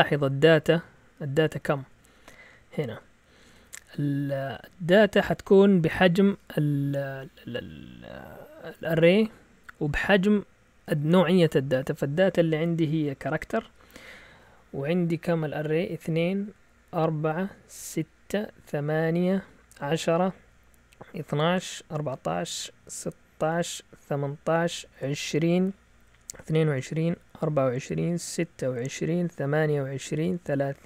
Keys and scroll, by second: 0.1 Up, 0.7-2.2 typing.